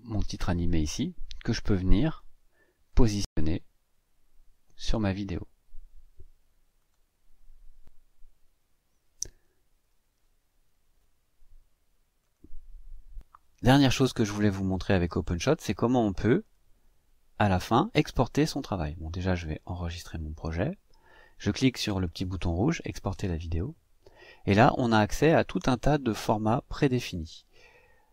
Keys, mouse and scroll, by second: 2.1-5.1 drag, 6.7 click, 12.1 click, 19.4-22.7 drag, 23.9 click.